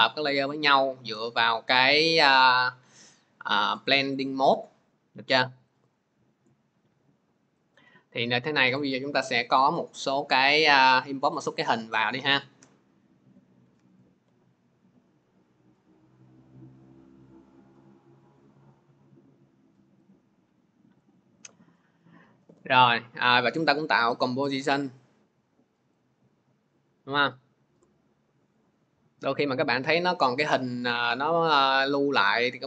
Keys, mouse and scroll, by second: 5.6 click, 5.8 click, 7.5 click, 8.2 click, 8.7 click, 8.9 click, 10.5 click, 10.8-11.3 scroll, 11.5 scroll, 12.2 click, 13.3 ctrl+click, 13.9 ctrl+click, 17.3 scroll, 19.9-20.6 scroll, 23.9 click, 25.9 click, 27.4-27.9 scroll.